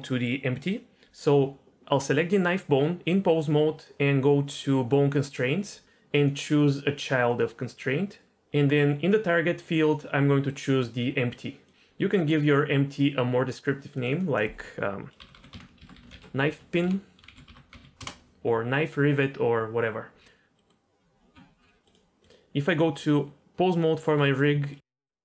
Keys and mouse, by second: 5.2 click, 6.2-7.5 drag, 9.8-11.7 drag, 13.9 click, 14.1-18.1 drag, 20.6 middle click, 21.0 Tab, 22.2 click, 22.6 Tab, 24.7 middle click, 25.0 g.